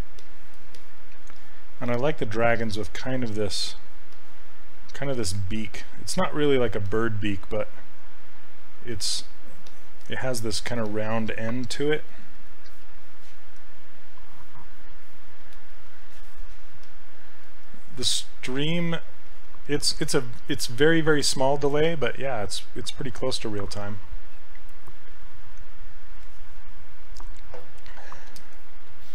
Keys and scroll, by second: 1.9 s.